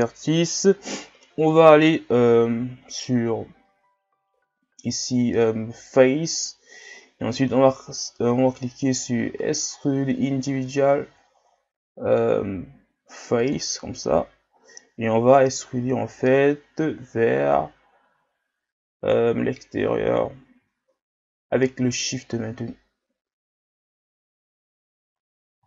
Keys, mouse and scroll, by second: 6.3-25.6 drag.